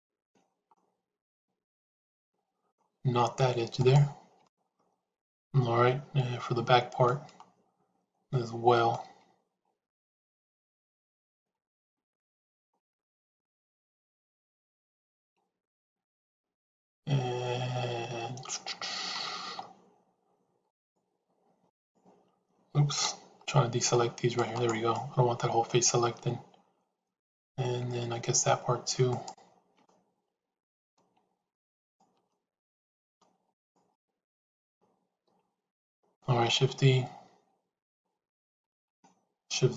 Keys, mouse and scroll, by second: 0.6-2.7 middle drag, 4.3-7.0 middle drag, 7.2-8.9 middle drag, 12.7-19.1 middle drag, 20.7-21.7 shift+drag, 22.9 c, 24.8-27.5 middle drag, 29.8 middle click, 32.3 middle click, 33.8-36.1 middle drag, 38.2 shift+z, 38.7-39.7 middle drag.